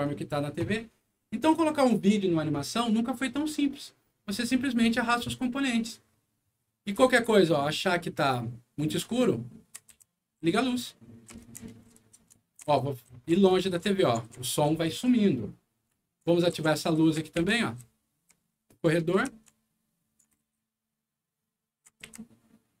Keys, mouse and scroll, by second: 8.3 d, 9.9-14.1 typing, 16.3-20.6 typing, 22.0-22.8 typing.